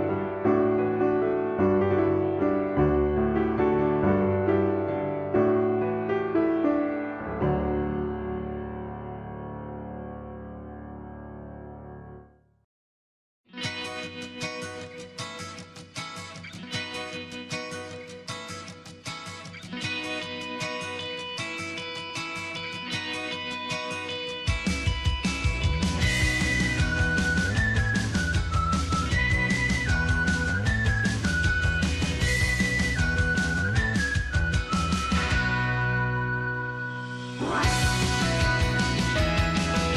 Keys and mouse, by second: 0.1 click, 1.3 shift+middle click, 3.0 ctrl+r, 8.7 shift+middle click, 9.3 click, 9.5-11.7 drag, 15.1 click, 16.4 click, 17.8 f, 19.5 ctrl+r, 21.8 shift+middle click, 22.7 click, 22.9-24.1 drag, 27.0 shift+middle click, 28.9 shift+middle click, 29.2 middle click, 30.5 shift+middle click, 31.3 click, 35.9 click, 37.9 click, 39.1 shift+middle click, 39.5 click.